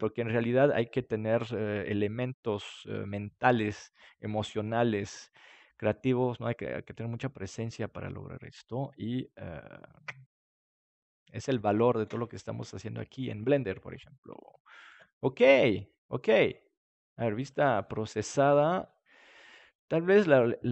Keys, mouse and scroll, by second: 7.3-11.9 middle drag, 11.9 ctrl+s, 17.4-20.7 drag.